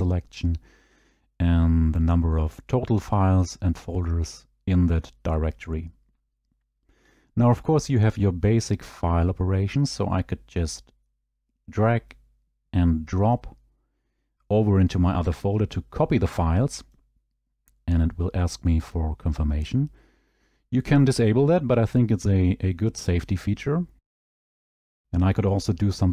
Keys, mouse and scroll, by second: 16.8 click, 24.2 click.